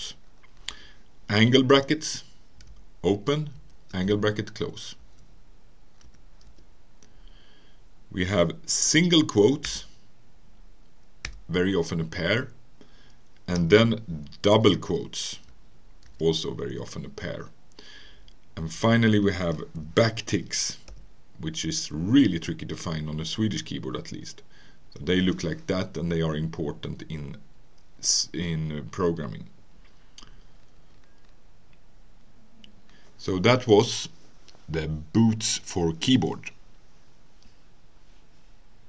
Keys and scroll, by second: 0.7 Return, 1.7 <, 3.6 >, 5.0 Left, 6.0 Right, 6.5 Return, 9.7 typing, 13.6 Return, 14.7 ", 16.1 ", 18.8 Return.